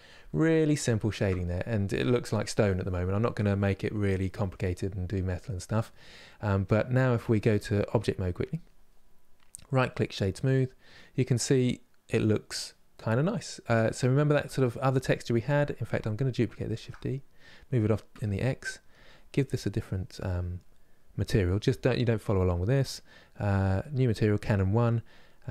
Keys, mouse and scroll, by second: 8.3-9.9 drag, 9.9 right click, 10.3-16.5 middle drag, 16.5 shift+d, 23.6-25.5 drag.